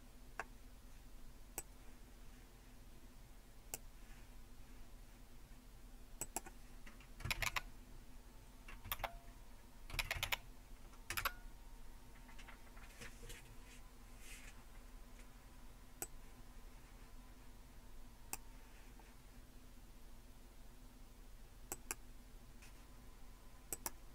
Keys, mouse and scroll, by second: 1.6-3.8 drag, 6.2 click, 7.2-10.7 typing, 11.1 Return, 16.0-18.4 drag, 21.7 click, 23.7 click.